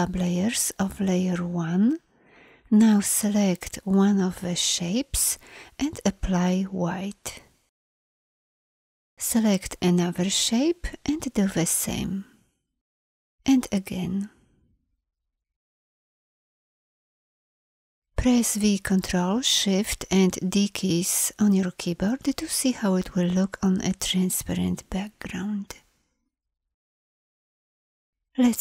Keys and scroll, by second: 18.7 ctrl+shift+d, 26.7 ctrl+shift+d.